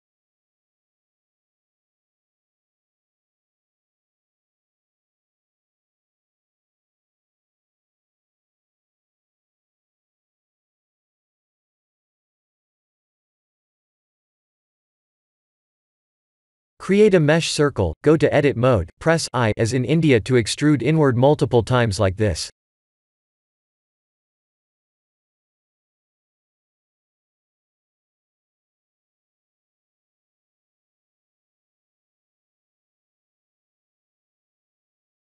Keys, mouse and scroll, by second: 0.0-0.8 scroll down 1, 0.8 scroll down 2, 1.5 middle click, 1.6 middle click, 1.7 middle click, 2.3 click, 2.5 Tab, 2.9 3, 3.1 click, 4.5 click, 6.9 click, 7.4 click, 7.9-8.4 scroll down 2, 8.2 Tab, 8.7 click, 9.1 middle click, 11.9-12.3 scroll down 3, 12.3 shift+middle click, 13.1 click, 13.9 middle click, 18.0 shift+a, 22.4 click, 23.7 KP_2, 24.3 KP_7, 25.9 shift+z, 27.0 Tab, 27.9-28.9 scroll up 4, 29.6 f, 32.5-35.3 typing.